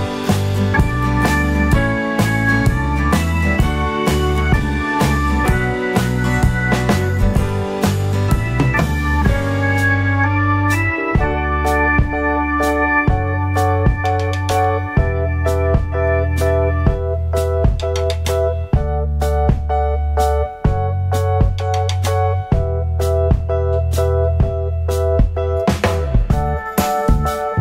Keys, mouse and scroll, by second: 0.6 Tab, 0.9 `, 1.6 s, 2.3 scroll down 2, 2.4 `, 3.2 scroll up 2, 3.5 `, 4.1 scroll down 2, 4.3-4.6 scroll up 2, 5.7 Tab, 6.1 click, 8.4 click, 10.7 1, 10.8 click, 11.2 ctrl+KP_Add, 12.4 click, 13.3 scroll down 1, 13.6 alt+a, 13.6 `, 14.2-14.6 scroll up 1, 14.8 `, 17.7 click, 18.0 `, 19.5 scroll down 1, 19.6 alt+a, 19.7 `, 20.7 scroll up 1, 20.9 `, 21.3-21.7 scroll up 1, 21.8 click, 26.0 click.